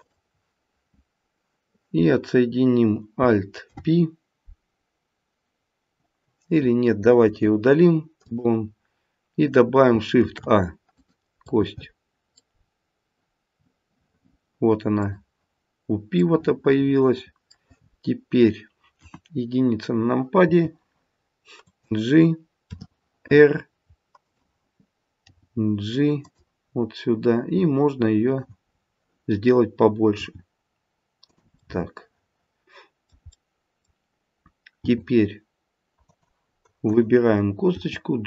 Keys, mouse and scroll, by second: 3.7 alt+p, 7.2 Delete, 10.1 shift+a, 10.8 click, 11.5 middle click, 12.5-13.3 scroll down 2, 13.3-14.0 scroll down 1, 14.9 click, 16.2 middle click, 18.9 KP_1, 20.4 g, 22.6 r, 25.2 g, 26.7-28.2 scroll up 4, 28.2 click, 28.2-28.7 scroll up 1, 28.7-29.3 scroll down 2, 30.1 g, 31.6 middle click, 32.4 middle click, 33.4 middle click, 34.8 g, 36.9 click, 37.7 g.